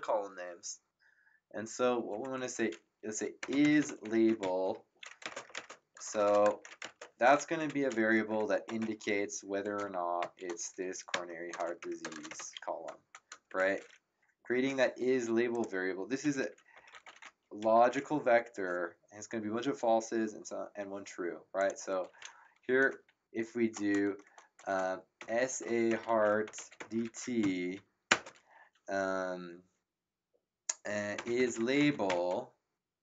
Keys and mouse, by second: 2.1 Up, 3.2-6.8 typing, 7.6 End, 8.6 =, 10.2-12.8 typing, 13.5 Return, 15.5 click, 16.0-18.1 typing, 21.5 click, 24.9-28.1 typing, 30.9-32.5 typing.